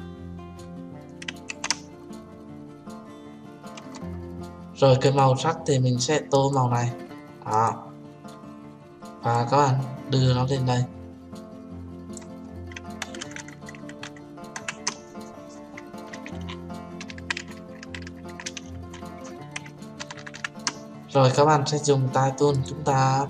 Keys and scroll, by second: 1.9 ctrl+z.